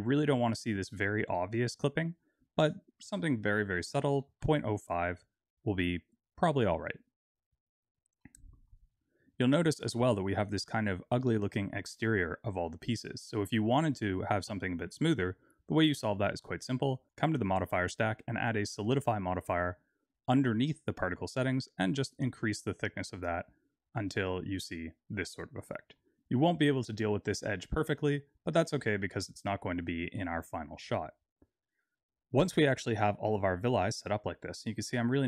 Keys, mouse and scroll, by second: 2.4 click, 7.2 click, 7.7-8.2 scroll down 3, 8.2 middle click, 14.2 click, 15.4 click, 17.1 click, 21.4 click, 23.9 middle click, 25.6 middle click, 27.9 middle click, 30.6-31.0 scroll up 3.